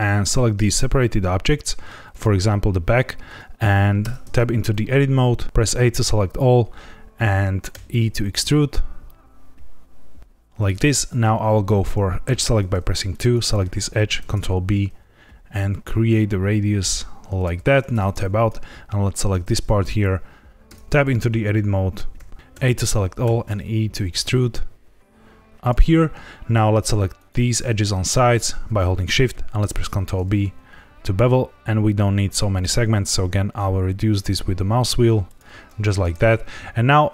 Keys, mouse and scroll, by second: 2.0 click, 3.9 Tab, 4.6 a, 5.4 ctrl+z, 5.6 a, 7.7 e, 10.5 click, 12.2 2, 13.0 click, 14.1 ctrl+b, 17.3 click, 17.9 Tab, 18.3 click, 20.6 Tab, 22.1 a, 22.3 ctrl+z, 22.5 a, 23.2 e, 25.5 click, 27.1 click, 28.2 shift+click, 29.6 ctrl+b, 31.2-32.6 scroll down 3, 35.2 click, 35.7 Tab.